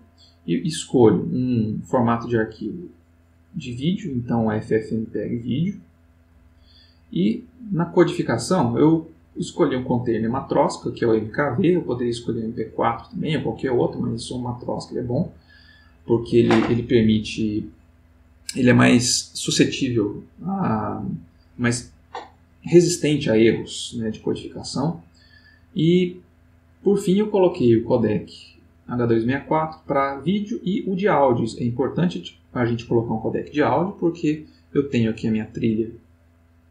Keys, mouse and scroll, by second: 2.3 click, 5.9 click, 6.9 middle click, 8.8 click, 15.2 click, 15.9 middle click, 24.9 middle click, 34.5 click.